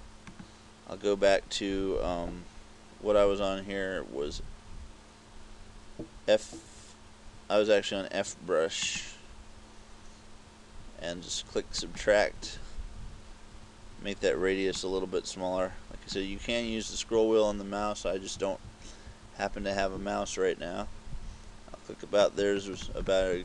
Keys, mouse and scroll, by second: 0.4 click, 12.0 click, 14.9 click, 18.4 KP_6, 18.7 KP_6, 19.1 KP_2, 22.4 click, 22.7 click, 23.0 click, 23.3 click.